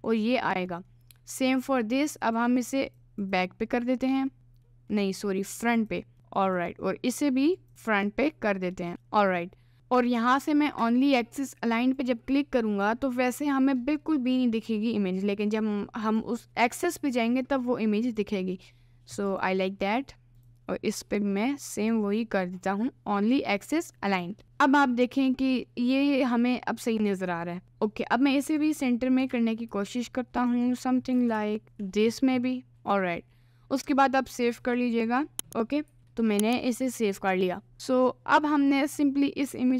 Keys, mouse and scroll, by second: 0.2-0.5 scroll up 1, 0.7 middle click, 0.9-1.4 scroll up 1, 1.4 click, 2.3 click, 2.9 click, 3.3 click, 3.9 middle click, 4.7 middle click, 5.0 scroll up 1, 7.5 click, 8.1-9.3 middle drag, 11.9 click, 12.9 middle click, 13.6-16.1 middle drag, 16.1 click, 17.3 middle click, 18.1 click, 19.3 click, 21.1 middle click, 21.9 click, 29.3 g, 31.3 g, 37.7 middle click, 38.9 click.